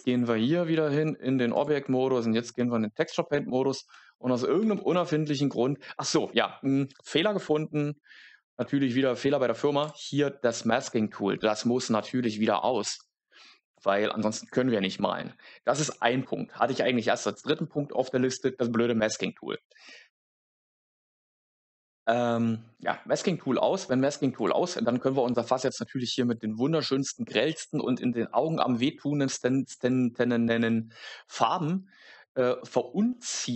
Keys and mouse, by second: 1.5-3.0 drag, 5.0 middle click, 9.7 click, 24.3 click, 33.0 middle click.